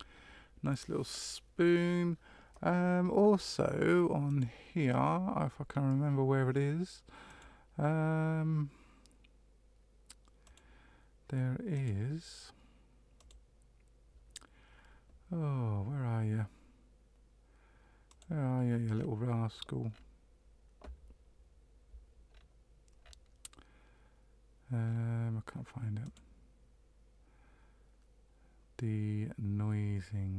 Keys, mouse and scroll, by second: 4.2 click, 7.2 click, 10.4 click, 11.7 click, 13.1 click, 18.1 click, 18.9 scroll down 1, 18.9-19.9 scroll down 1, 19.9-21.1 scroll down 5, 22.3-23.0 scroll up 1, 23.0-24.8 scroll down 1, 24.8-25.3 scroll down 1, 26.0 click.